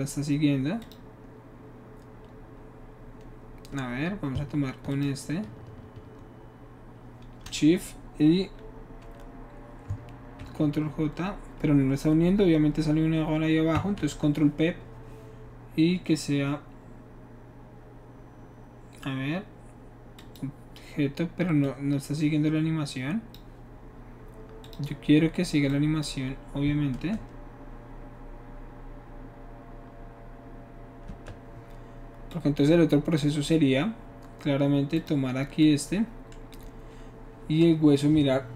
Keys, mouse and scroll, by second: 0.8 click, 4.9 shift+click, 10.4 ctrl+j, 14.0 ctrl+p, 20.1 click, 21.6-23.3 drag, 24.6 click, 25.7-26.0 drag, 27.2 space, 31.1 space, 32.3-33.2 drag, 35.0 click.